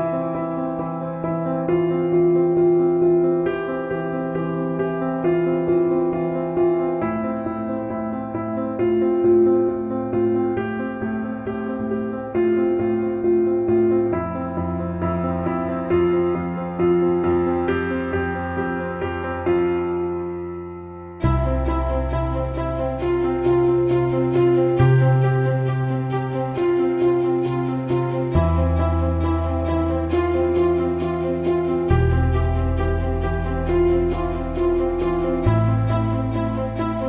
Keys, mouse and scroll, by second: 5.4 middle click, 5.7 middle click, 15.1 middle click, 15.7 middle click, 16.4 middle click, 27.1 middle click, 27.8 middle click, 35.1 middle click, 35.2 middle click, 35.4 middle click, 35.7 middle click.